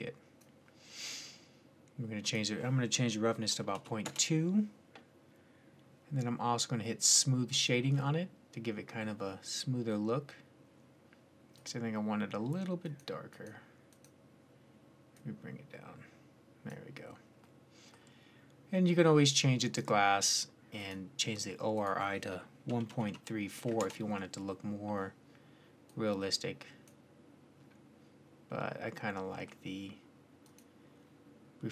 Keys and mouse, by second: 1.5 middle click, 4.8-7.3 middle drag, 8.9 click, 9.0-13.2 middle drag, 13.2-16.8 drag, 17.3-19.5 middle drag, 19.5-24.5 drag, 25.7-27.5 drag, 30.2-31.7 drag.